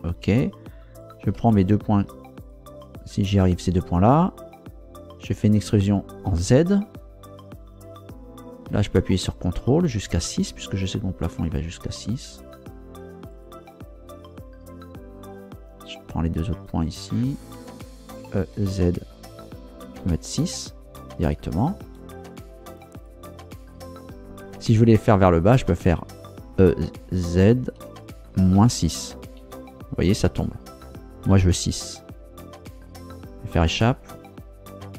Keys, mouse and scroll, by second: 1.0 right click, 1.5 shift+right click, 2.4 shift+right click, 3.0 shift+right click, 5.6 e, 6.3 z, 11.9 ctrl+click, 13.3 right click, 14.1 ctrl+right click, 18.2 e, 18.5 z, 20.0 6, 21.8 Return, 22.9 right click, 23.6 shift+right click, 26.5 e, 27.8 z, 28.6 KP_Subtract, 29.4 KP_6, 31.3 KP_6, 33.6 Escape.